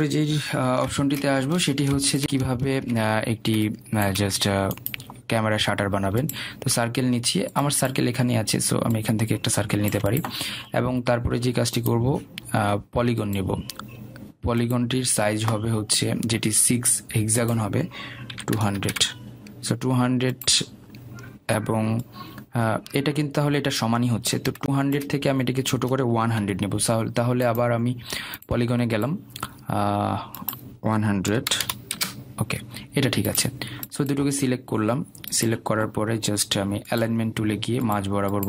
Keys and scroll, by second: 2.4 Delete, 21.0 Return, 28.6 Delete, 34.1 Return.